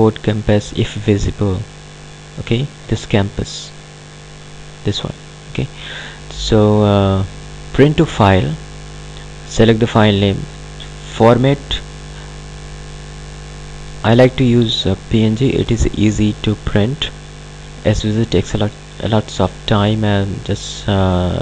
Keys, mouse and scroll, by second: 1.9 click, 7.7 click, 11.4 click.